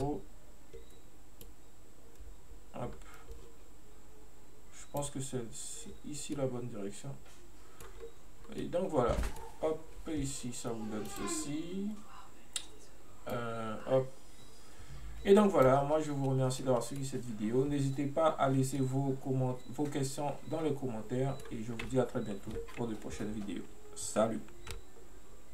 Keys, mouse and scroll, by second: 6.4-8.0 middle drag, 8.0-8.7 scroll up 1, 8.7-11.1 middle drag, 11.1 click, 13.4-16.3 drag, 16.3-16.7 scroll down 1, 16.7-18.3 middle drag, 18.3-18.8 scroll up 1, 18.8-21.9 middle drag.